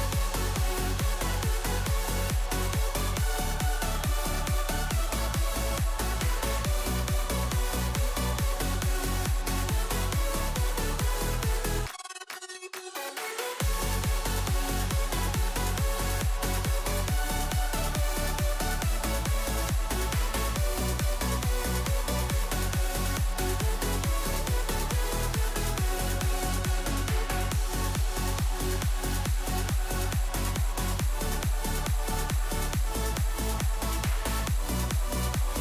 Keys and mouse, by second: 2.2 click, 2.9 s, 4.7 z, 5.7 3, 6.1 middle click, 7.3 alt+click, 8.0 alt+shift+click, 8.9 alt+shift+click, 10.0 alt+shift+click, 10.4 alt+shift+click, 13.8 alt+shift+click, 14.8 alt+shift+click, 15.3 click, 16.2 shift+d, 17.4 p, 18.6 Tab, 18.9 click, 19.6 Tab, 19.8 a, 20.6 click, 20.9 alt+e, 24.1 a, 24.6 shift+n, 24.9 Tab, 25.2 KP_1, 25.8 click, 27.1-27.4 drag, 28.1 click, 28.5 KP_1, 29.3 middle drag, 29.8 shift+middle drag, 30.6 shift+middle drag, 31.6 Tab, 31.8 a, 32.6 s, 34.4 click, 35.3 s.